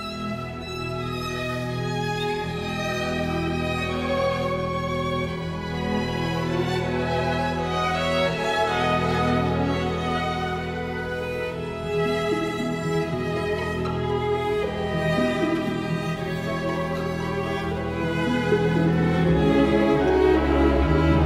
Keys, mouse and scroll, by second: 15.8 Delete, 18.9 space.